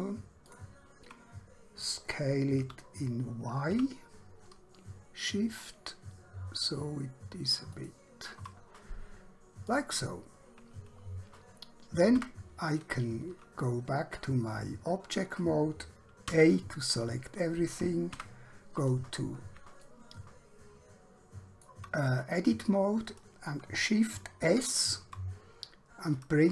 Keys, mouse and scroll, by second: 0.5 click, 2.6 s, 3.7 y, 7.8 shift+click, 9.7 click, 10.6 scroll down 1, 11.0 scroll up 1, 12.3 Tab, 16.3 a, 18.1 Tab, 19.2 scroll down 1, 20.1 shift+middle drag, 24.5 shift+s.